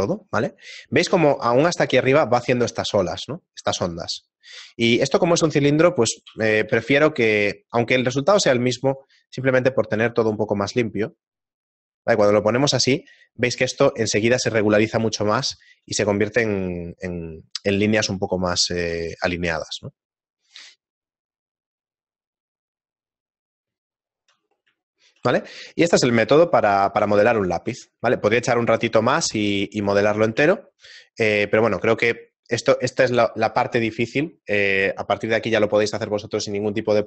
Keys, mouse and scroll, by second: 0.5 shift+middle click, 1.2 shift+middle click, 5.0 Tab, 5.0 shift+middle click, 5.8 ctrl+r, 9.3 ctrl+r, 12.2 Tab, 14.2 shift+middle click, 15.6 shift+middle click, 19.0 shift+middle click, 19.0 a, 20.8 shift+middle click, 24.7 middle click, 25.6 shift+middle click, 26.4 shift+middle click, 29.4 middle click, 30.5 shift+middle click, 31.4 middle click, 33.8 shift+middle click.